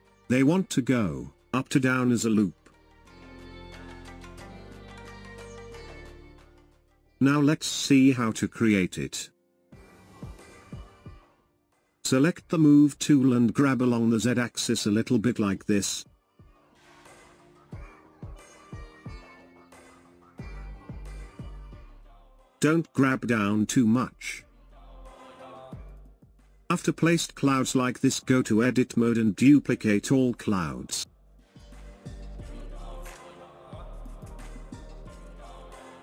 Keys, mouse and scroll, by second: 0.5 click, 35.3 shift+d.